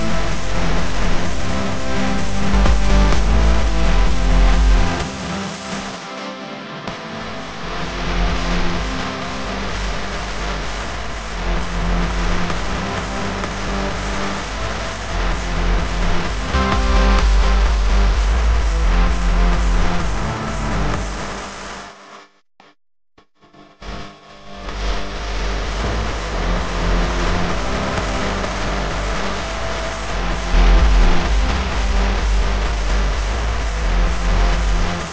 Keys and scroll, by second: 0.3 space, 2.8 space, 6.1 space, 6.6 alt+super+space, 6.6 alt+super+space, 6.7 alt+super+space, 6.8 alt+super+space, 7.1 alt+super+space, 7.6 super+space, 8.7 super+space, 8.8 super+space, 8.9 super+space, 12.7 space, 13.2 space, 14.3 space, 15.3 typing, 18.4 r, 21.2 a, 23.9 space, 24.4 super+space, 24.5 super+space, 24.6 super+space, 24.6 super+space, 25.6 super+2, 28.7 space, 29.2 alt+super+space, 29.3 alt+super+space, 29.3 alt+super+space, 29.6 alt+super+space.